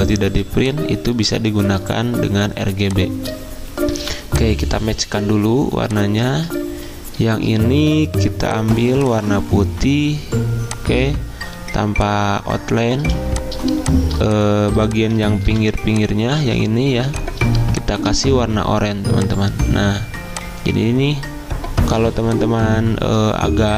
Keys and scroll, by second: 0.3 z, 2.8 v, 9.7 d, 13.0 z, 14.8 v, 16.4 ctrl+z, 17.0 z.